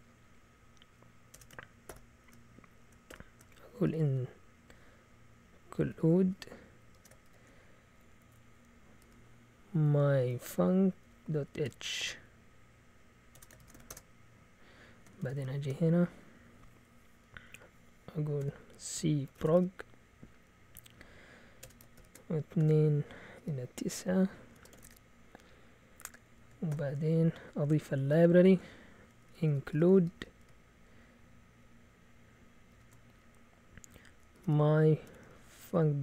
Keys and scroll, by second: 1.3 Escape, 1.9 typing, 3.1-7.4 typing, 9.0-14.1 typing, 15.2-15.9 typing, 18.7-20.0 typing, 21.6 Escape, 21.7-24.7 typing, 24.8 Return, 26.5-30.4 typing, 32.4-33.2 typing, 34.3-36.0 typing.